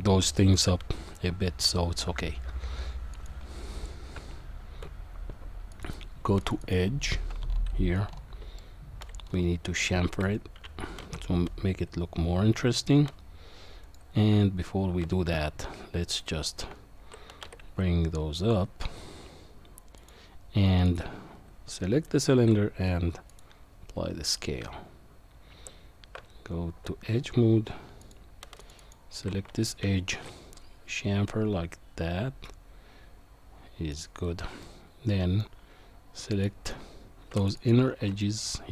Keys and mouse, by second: 3.2 click, 4.2 Tab, 6.4 alt+shift+click, 6.6 alt+shift+click, 8.6 shift+middle click, 9.8 shift+middle click, 11.0 ctrl+b, 14.3 Tab, 16.5 shift+click, 17.4 g, 22.3 ctrl+a, 24.6 Tab, 26.2 Tab, 28.0 click, 28.6 alt+shift+click, 28.8 alt+shift+click, 30.1 ctrl+b, 34.6 middle click, 36.3 click, 37.4 alt+shift+click, 37.6 alt+shift+click, 38.2 middle click.